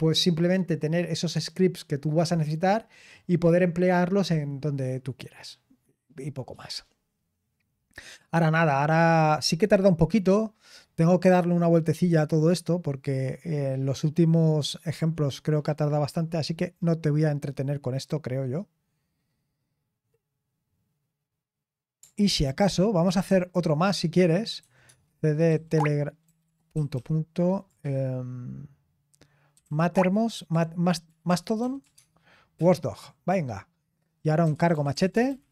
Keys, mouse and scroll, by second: 24.5-32.3 typing, 34.6-35.5 typing.